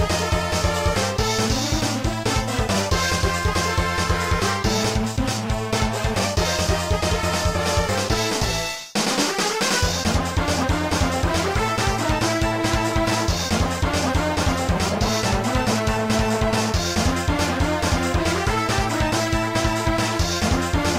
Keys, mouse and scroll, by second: 0.8 middle click, 1.7 scroll up 1, 2.9 middle click.